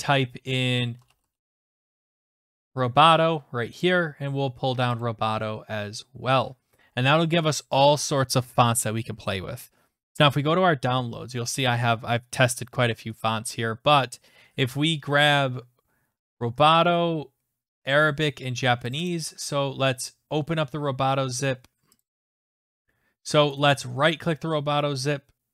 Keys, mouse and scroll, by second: 0.7-2.0 typing, 3.8 click, 5.0 click, 10.3 click, 16.4 click, 19.0 click, 19.1 click, 22.0 click, 23.6 right click.